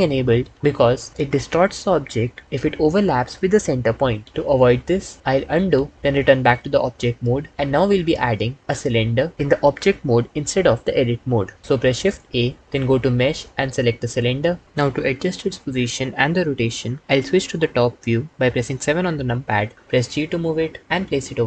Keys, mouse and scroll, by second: 5.2 ctrl+z, 5.4 ctrl+z, 6.7 Tab, 12.2 shift+a, 19.1 KP_7, 20.0 g.